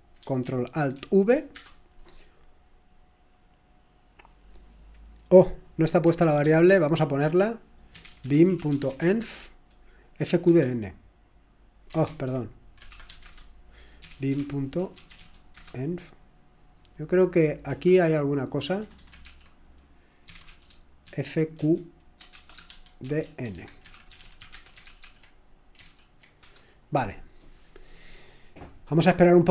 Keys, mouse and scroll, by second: 0.9 ctrl+alt+v, 1.5 Return, 6.4 ctrl+c, 7.7-9.5 typing, 10.4 Return, 11.9-15.9 typing, 12.0 ctrl+c, 17.6-26.9 typing, 28.2-28.9 typing.